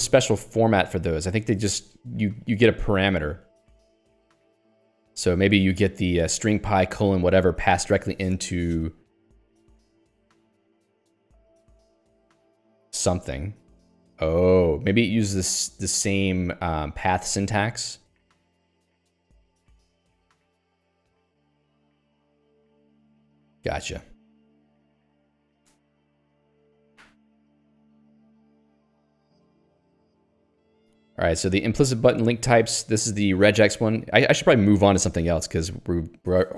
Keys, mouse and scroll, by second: 1.1 middle click, 2.0 scroll down 1, 4.5-5.7 scroll down 1, 7.1 click, 7.8 click, 9.9-10.3 scroll up 1, 12.1 scroll down 1, 17.4 click, 18.2 click, 18.8 click, 29.3 click, 29.4 middle click, 31.9 middle click, 32.6-36.1 scroll down 1, 36.1 scroll down 1.